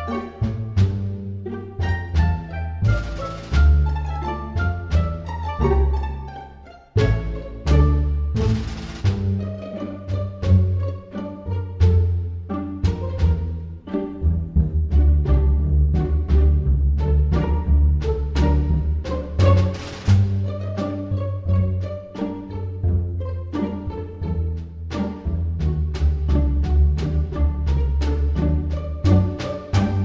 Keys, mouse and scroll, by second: 1.2 click, 4.0 s, 12.9 e, 23.6 g.